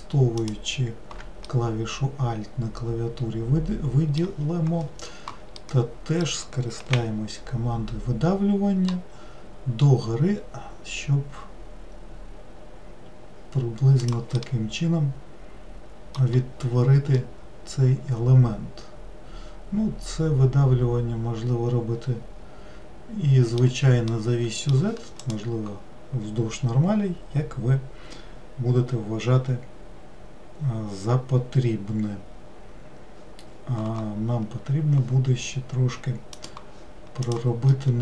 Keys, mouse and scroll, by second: 0.4 alt+click, 1.5-4.7 middle drag, 5.6-7.0 middle drag, 7.0 e, 14.4-20.4 middle drag, 24.1-27.3 middle drag, 37.3 click, 37.7-38.0 middle drag.